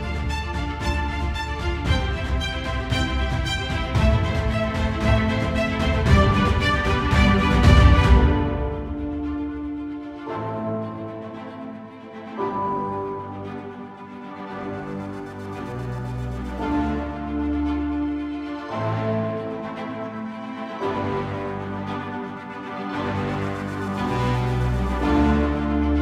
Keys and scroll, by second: 0.1 ctrl+=, 1.2 space, 11.2 space, 15.6-16.2 typing, 17.3 typing.